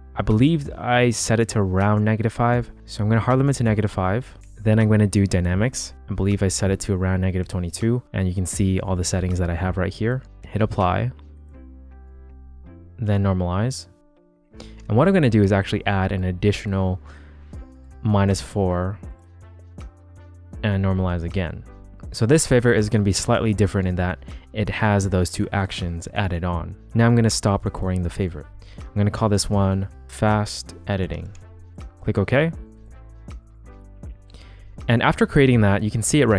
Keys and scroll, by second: 4.9 d, 6.4 -, 6.7 2, 13.4 c, 14.7 g, 16.6 -, 17.2 4, 20.4 c, 29.5-31.9 typing.